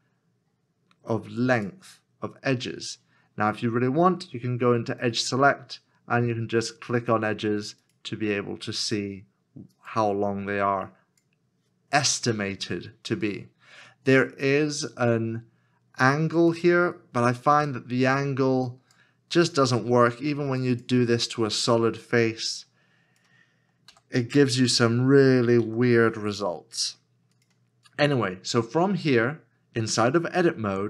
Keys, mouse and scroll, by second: 25.6 ctrl+z.